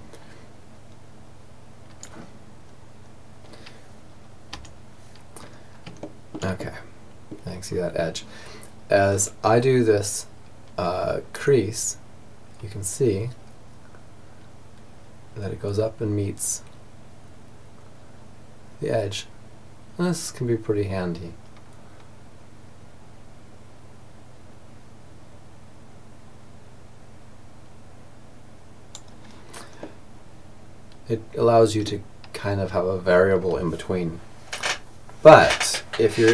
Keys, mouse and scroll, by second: 1.7-3.5 middle drag, 3.5 t, 4.4-10.4 middle drag, 10.4 click, 11.3 right click, 28.8 middle click, 29.4-30.8 middle drag.